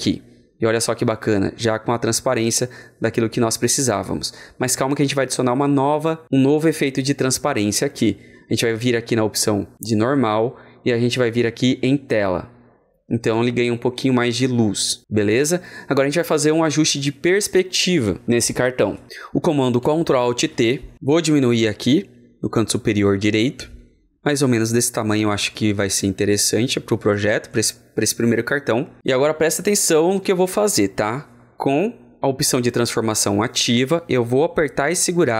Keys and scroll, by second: 20.2 ctrl+alt+t.